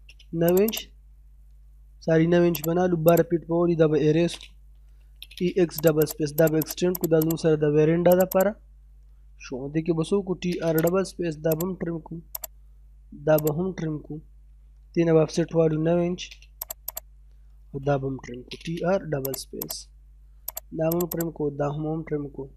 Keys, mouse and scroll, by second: 0.0 space, 0.5 click, 1.0 middle click, 1.8-2.5 scroll up 1, 2.5 click, 4.0-5.4 typing, 5.4-5.8 scroll down 1, 5.8 click, 9.7-10.6 typing, 10.8 click, 14.1-14.5 scroll up 1, 15.4 o, 15.5 space, 15.9 9, 16.2 space, 16.6 click, 17.7-18.7 typing, 18.6-19.3 scroll up 1, 19.3 click, 20.1-20.5 scroll up 1, 20.5 click, 21.5-22.2 scroll down 1.